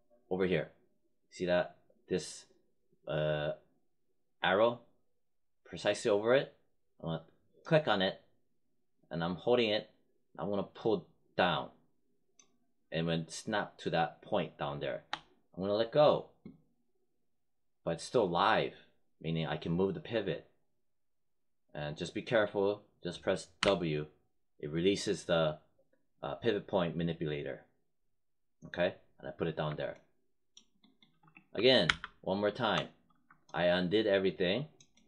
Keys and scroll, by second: 23.5 w.